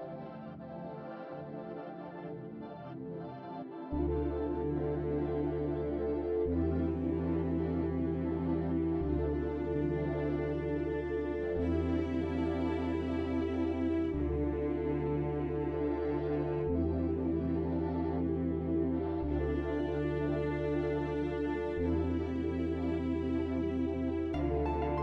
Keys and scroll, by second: 3.2 ctrl+z, 6.6-7.8 typing, 16.8 ctrl+z, 18.7 F4, 24.9 F4.